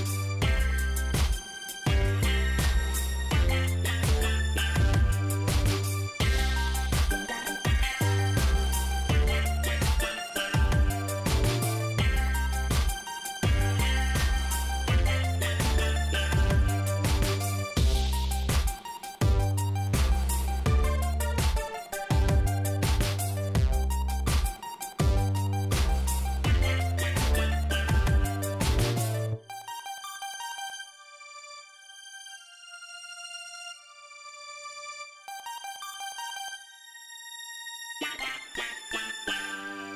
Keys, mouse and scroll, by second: 5.9 click, 6.7 click, 8.7-10.2 scroll up 3, 10.2 scroll up 1, 13.1 scroll down 2, 14.0 scroll up 2, 15.4-15.8 scroll down 4, 17.2 scroll up 2, 19.3 scroll up 2, 19.8 scroll up 2, 20.9 scroll down 2, 23.3 click, 25.0 shift+right click, 27.2 click, 28.9 ctrl+click, 31.7 click, 36.8 click, 38.4 click, 39.3 click.